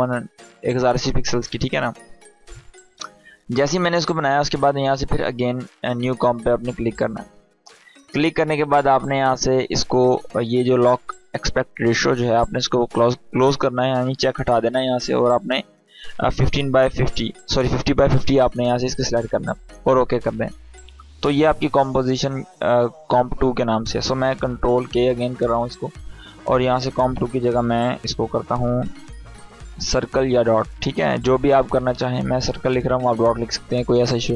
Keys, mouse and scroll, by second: 7.9 click, 12.5 click, 16.0 Tab, 19.7 click, 22.0 click, 24.5 ctrl+k, 26.7 BackSpace, 29.2 shift+c, 29.5 i, 32.5 Return.